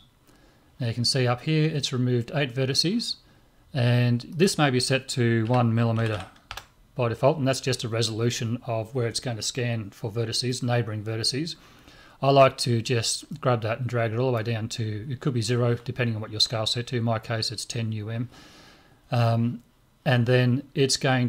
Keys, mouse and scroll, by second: 4.3-6.1 drag, 6.1 m, 13.3-15.2 drag.